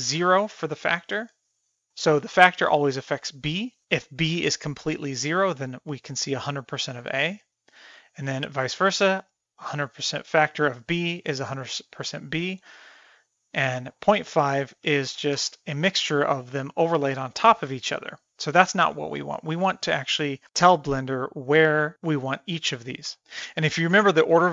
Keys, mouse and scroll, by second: 0.3-1.3 drag, 8.1-9.3 drag, 11.5-13.4 middle drag, 14.1 click, 16.4-17.9 middle drag, 23.7 click.